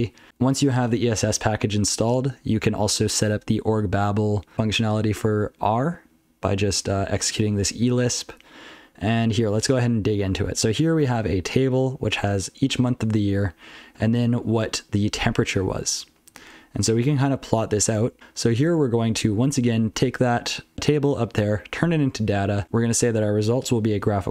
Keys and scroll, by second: 0.1 ctrl+n, 0.4 ctrl+p, 0.6 ctrl+p, 0.8 ctrl+p, 2.1 ctrl+n, 2.4 ctrl+n, 2.6 ctrl+n, 2.8 ctrl+n, 2.9-3.3 ctrl+f, 3.6 ctrl+n, 4.5 ctrl+p, 6.8 ctrl+c, 7.3 ctrl+n, 7.4 ctrl+c, 7.6 ctrl+n, 7.8 ctrl+p, 8.1-8.6 ctrl+n, 9.1 ctrl+l, 9.6 ctrl+l, 10.3 ctrl+a, 10.8 ctrl+n, 11.8 ctrl+a, 11.9 ctrl+f, 12.2 ctrl+f, 12.7-13.1 ctrl+n, 13.5 ctrl+p, 13.9 ctrl+p, 14.1 ctrl+p, 14.3 ctrl+p, 14.5-14.9 ctrl+f, 15.2-15.6 ctrl+n, 15.8 ctrl+n, 16.2 ctrl+n, 16.5 ctrl+n, 16.8 ctrl+n, 17.4 ctrl+l, 17.8 ctrl+n, 18.2 ctrl+f, 18.3 ctrl+f, 19.1 ctrl+alt+f, 19.4 ctrl+alt+f, 19.9-20.4 ctrl+f, 21.4 ctrl+alt+b, 22.0-22.5 ctrl+f, 22.6 ctrl+alt+f, 23.2 ctrl+alt+f, 24.1-24.3 ctrl+f.